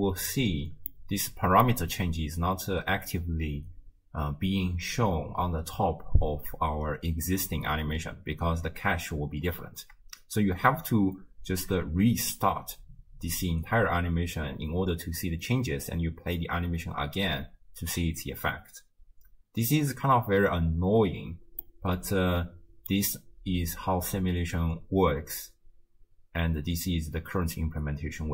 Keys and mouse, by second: 0.9 middle click, 11.5 shift+space, 15.5 space, 21.0 space, 21.6-23.0 middle drag.